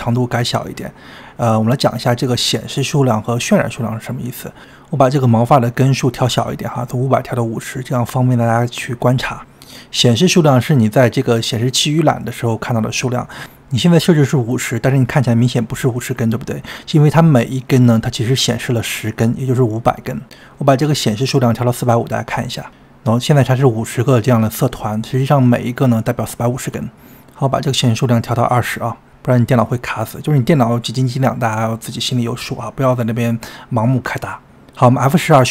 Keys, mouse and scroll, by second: 5.5-24.6 drag, 5.5-35.5 middle drag.